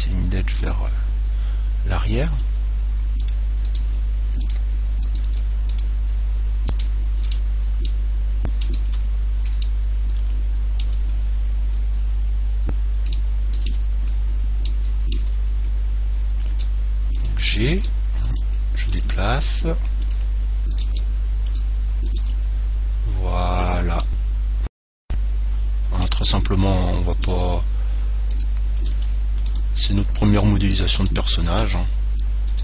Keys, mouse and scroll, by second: 0.9 click, 1.1-2.7 middle drag, 2.3 right click, 2.5 g, 4.0 g, 5.4 g, 6.9 click, 6.9-8.8 middle drag, 6.9 right click, 12.3-12.7 scroll up 1, 12.7-13.4 scroll down 1, 13.9-15.0 middle drag, 15.1-16.7 middle drag, 16.9 g, 17.6 click, 17.9 right click, 18.0 g, 19.4 g, 20.9 right click, 21.1 g, 22.4 g, 22.8 click, 22.8 right click, 24.0 click, 24.3-25.3 middle drag, 25.8 middle click, 26.9-28.4 middle drag, 27.4 right click, 27.4 g, 28.7 click, 29.1 g, 30.6 g, 31.3 click, 31.3 middle click, 31.3 right click, 31.5 click, 31.5 right click.